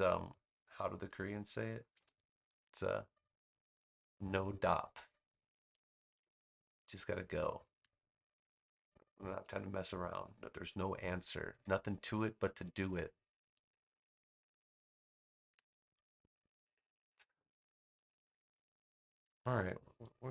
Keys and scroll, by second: 6.0 super+g, 19.1 super+g.